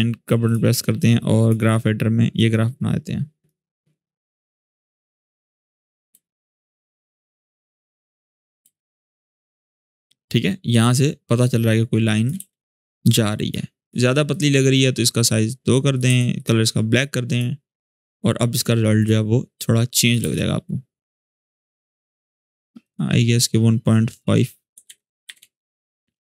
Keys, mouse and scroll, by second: 0.2-3.3 drag, 4.1 click, 5.9 space, 7.7-8.3 click, 8.4 space, 9.9-12.1 drag, 12.1 space, 13.0 click, 15.8 2, 16.1 click, 17.8 click, 20.0 space, 22.0 click, 24.5-25.5 typing.